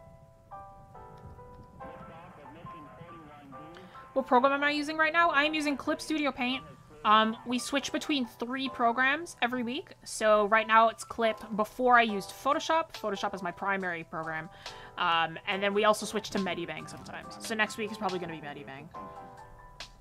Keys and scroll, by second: 19.7 ctrl+z.